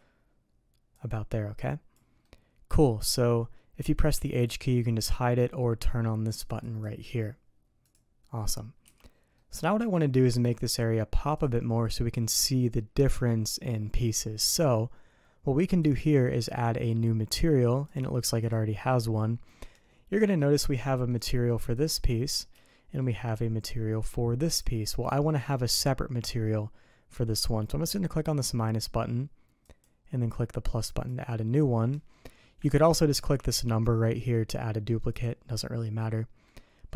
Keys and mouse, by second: 0.9-2.0 drag, 2.2 middle click, 6.3 click, 6.6 click, 7.8 click, 8.8 h, 9.4 middle click, 15.7 click, 17.9 click, 20.2 middle drag, 20.8 shift+middle drag, 21.7 click, 22.7-23.0 shift+middle drag, 24.5 click, 29.7 click, 30.9 click, 32.7 ctrl+z, 33.2 ctrl+z, 35.2 click, 36.5-36.9 middle drag.